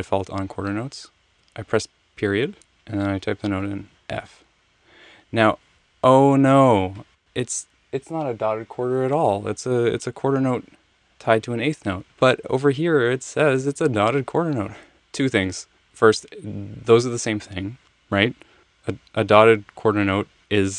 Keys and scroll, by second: 3.8 f.